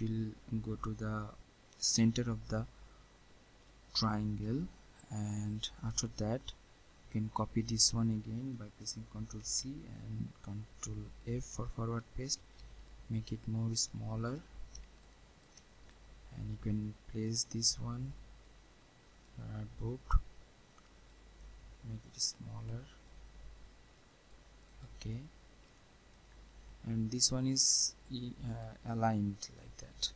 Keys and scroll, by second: 9.4 ctrl+c, 11.0 ctrl+f.